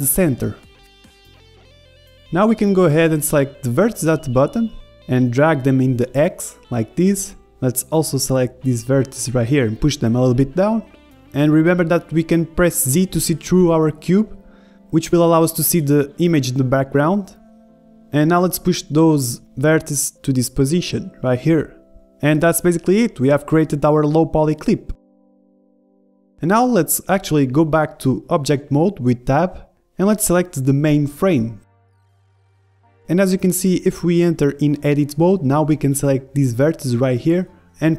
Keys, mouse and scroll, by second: 0.2 middle click, 1.0 middle click, 1.3-2.9 drag, 1.5 a, 1.7 a, 2.0 b, 4.0-6.1 drag, 5.9 a, 6.1 b, 7.0-9.1 drag, 9.5-11.4 drag, 13.4 z, 13.8-15.8 middle drag, 14.6-17.0 typing, 18.9 g, 21.2-23.1 middle drag, 23.1-24.1 scroll up 1, 23.7 Tab, 24.1-27.2 middle drag, 24.6 z, 27.2 KP_1, 27.8 click, 27.9 Tab, 29.4 middle click, 29.7 click, 30.2-32.3 middle drag, 32.2 click, 32.5-33.4 scroll up 1, 33.4 scroll up 1, 33.5-35.2 middle drag, 34.5 Tab, 34.7 a, 34.9 b, 35.2 click, 36.0-37.9 drag.